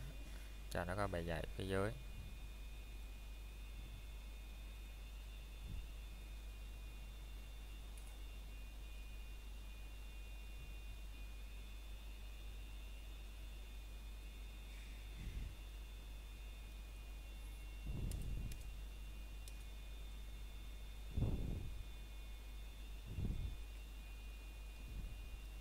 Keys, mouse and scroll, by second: 0.6 scroll up 1, 3.9 middle click, 4.7 scroll up 1, 9.1 middle click, 14.7 middle click, 15.3 ctrl+right click, 20.4 middle click, 22.4 a, 22.6 middle click, 23.1 ctrl+right click.